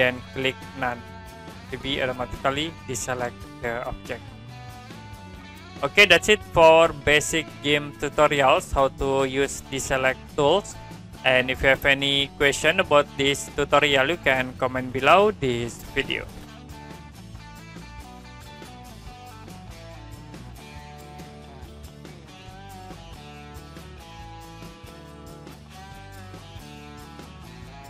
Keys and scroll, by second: 14.5 Print.